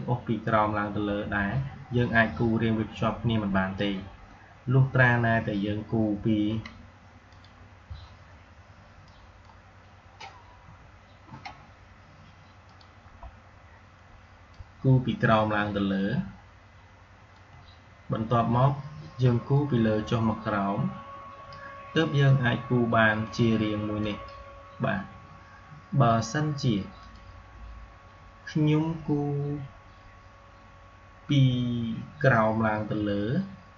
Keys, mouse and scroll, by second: 0.3-6.1 drag, 7.2-10.5 drag, 10.5 Delete, 12.5-23.1 drag, 26.9 click, 32.2-33.7 drag.